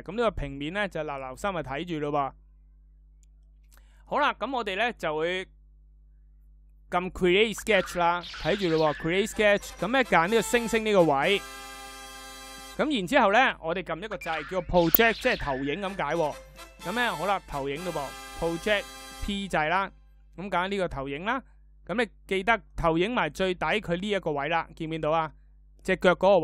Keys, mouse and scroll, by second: 14.0 p.